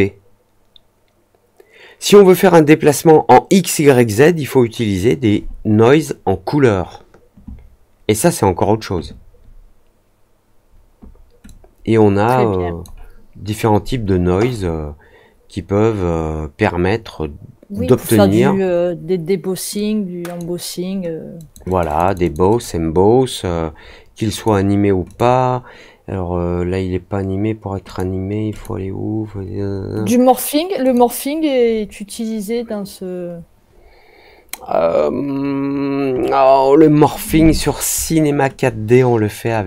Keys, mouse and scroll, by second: 11.4-12.8 drag, 14.5-17.8 drag, 19.7 click, 21.3 click, 21.6 click, 21.8 click, 22.0 click, 22.2 click, 22.4 click, 24.3 click, 25.0 click, 27.8 click, 28.5 click, 30.8 click, 39.4-39.6 drag.